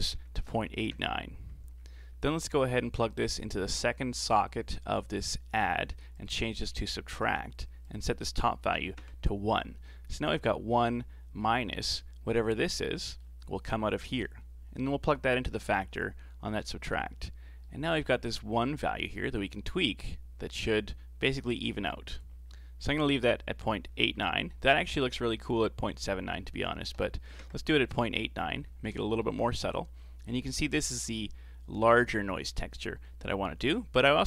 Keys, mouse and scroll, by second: 1.8-2.4 scroll up 7, 2.4-3.2 middle drag, 3.2 click, 6.2-10.8 drag, 12.8 scroll down 3, 13.0-14.1 middle drag, 14.1 click, 17.6-18.6 middle drag, 18.6-21.6 drag, 22.9-25.9 drag, 28.6-29.0 scroll up 2, 29.0-32.0 shift+middle drag, 32.8-33.2 scroll down 5, 33.2 middle click, 34.0 click.